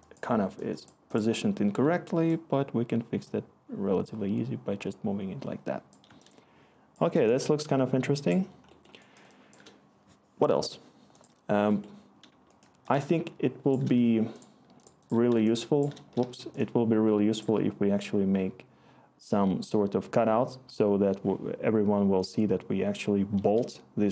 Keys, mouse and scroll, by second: 8.0-9.6 click, 8.1 click, 12.2 click, 16.1 shift+w.